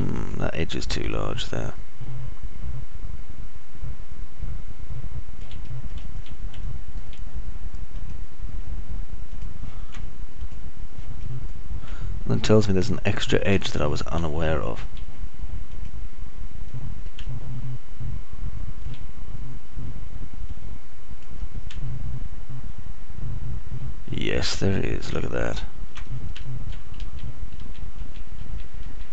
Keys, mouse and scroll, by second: 0.0-1.3 alt+drag, 0.0-1.3 alt+middle drag, 0.0-1.3 alt+right drag, 1.5 right click, 2.5-6.0 alt+drag, 2.5-6.0 alt+middle drag, 2.5-6.0 alt+right drag, 6.6 alt+middle click, 7.1 middle click, 8.1 alt+click, 8.1 alt+middle click, 8.1 alt+right click, 10.6 ctrl+right click, 13.3-15.0 alt+middle drag, 15.3 middle click, 16.0 alt+middle click, 17.1 right click, 18.6-20.3 alt+middle drag, 23.1 alt+middle click, 23.1-23.8 alt+scroll up 1, 28.0 alt+click, 28.0 alt+middle click, 28.0 alt+right click, 28.5 ctrl+z.